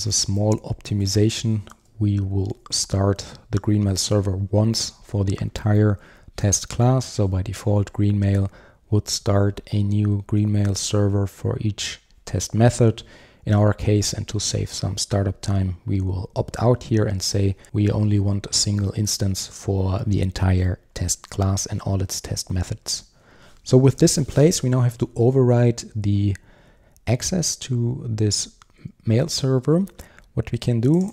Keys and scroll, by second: 0.4 Return, 29.6 super+1.